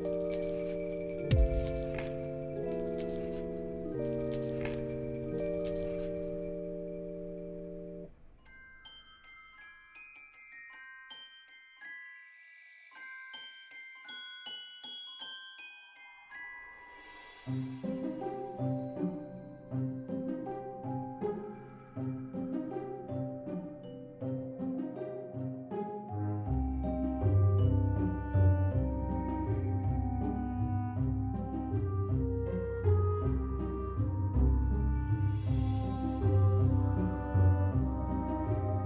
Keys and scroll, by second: 6.2 alt+x, 9.3 alt+x, 10.3 z, 11.4 alt+z, 16.8 z, 20.1 9, 20.9 1, 21.8 5, 22.1 Return, 23.8 z, 24.8 alt+x, 26.6 1, 26.9 Return, 28.5 1, 28.9 Return, 29.9 z, 30.6 alt+x, 36.6 ctrl+c, 36.8 ctrl+v.